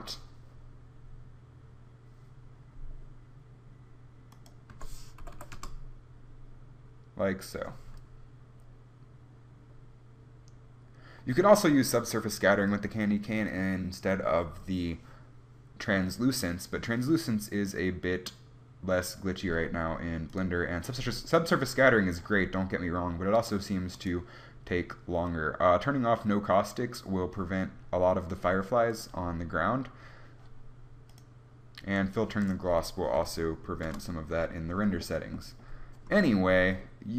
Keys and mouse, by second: 5.4 click, 5.4 0, 24.1-29.0 drag, 29.0-34.3 drag, 35.1-36.2 middle drag, 36.2 KP_1.